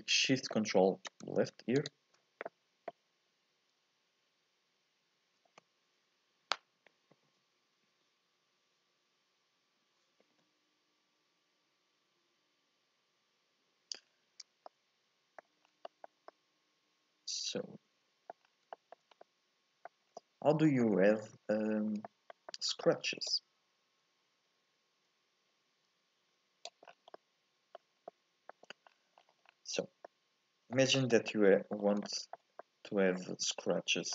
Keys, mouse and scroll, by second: 1.8 ctrl+shift+click, 14.1-14.7 scroll down 2, 14.7 middle click, 15.6 scroll up 1, 15.9-18.5 shift+middle drag, 18.5 scroll down 3, 18.8 shift+middle click, 19.1 scroll up 2, 19.3 middle click, 20.1 scroll up 1, 20.2-21.4 shift+middle drag, 21.4 scroll up 2, 22.1-23.4 shift+middle drag, 23.4-26.4 drag, 26.9 scroll down 1, 27.2 middle click, 28.0 scroll up 1, 28.1 middle click, 28.9-30.0 scroll down 11, 30.0 scroll up 1, 30.1-33.2 middle drag, 33.2-34.1 scroll up 1.